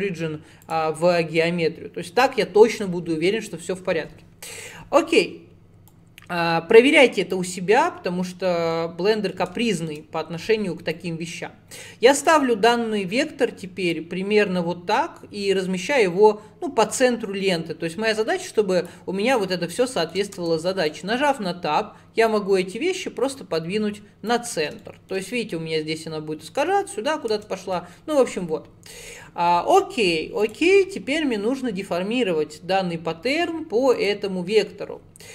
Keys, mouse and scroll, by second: 4.0 /, 5.1-5.9 scroll down 1, 5.9 click, 7.5-11.0 middle drag, 11.0 click, 12.5 shift+middle click, 12.7-13.7 scroll down 2, 14.0 click, 19.8 shift+middle click, 20.4 Tab, 20.9 click, 22.3 click, 24.9-27.4 shift+middle drag, 27.4 Tab, 28.0-30.5 middle drag, 30.5 click, 34.0 click.